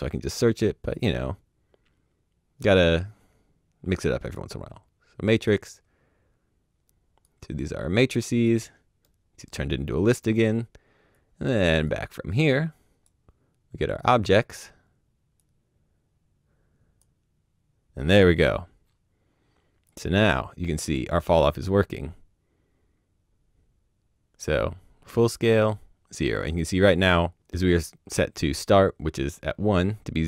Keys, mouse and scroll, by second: 4.2 click, 7.2 click, 9.0 middle click, 11.1 click, 19.8 click.